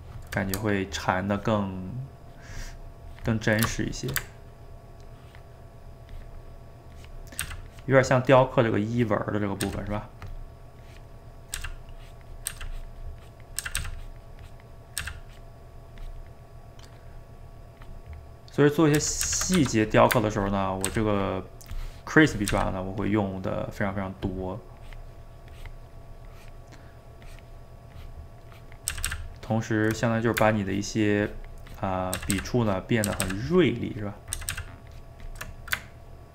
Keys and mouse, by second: 3.7-5.0 shift+middle drag, 5.0-7.4 ctrl+drag, 7.4 ctrl+z, 7.7-9.6 ctrl+drag, 9.6 ctrl+z, 9.9-11.6 ctrl+drag, 11.6 ctrl+z, 11.9 ctrl+click, 12.5 ctrl+z, 12.7 ctrl+click, 13.6 ctrl+z, 13.8 ctrl+z, 14.0-15.0 ctrl+drag, 15.0 ctrl+z, 15.3-19.0 ctrl+drag, 19.0 ctrl+z, 19.2 ctrl+z, 19.6 f, 20.4 ctrl+click, 20.9 ctrl+z, 21.1-22.5 ctrl+drag, 22.5 ctrl+z, 23.1-28.9 ctrl+drag, 28.9 ctrl+z, 29.1 ctrl+z, 29.4 ctrl+click, 29.9 middle click, 30.7-32.2 ctrl+drag, 32.2 ctrl+z, 32.3 ctrl+z, 32.6 ctrl+click, 33.1 ctrl+z, 33.2 ctrl+z, 33.4 ctrl+click, 34.4 ctrl+z, 34.5 ctrl+z, 34.9 ctrl+click, 35.6-36.3 ctrl+middle drag.